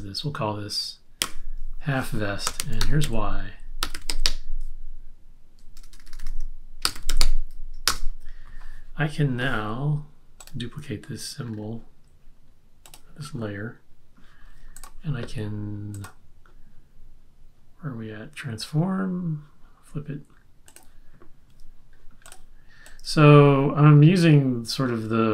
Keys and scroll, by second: 1.2 F8, 2.3-4.7 typing, 5.8-7.6 typing, 7.9 Return.